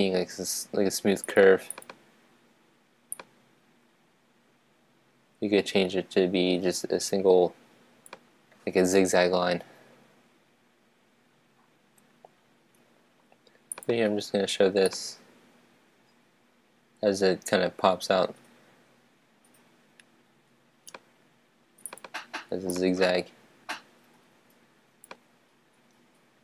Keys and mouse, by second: 3.2-5.2 drag, 15.0-16.9 right drag, 22.9-24.6 drag.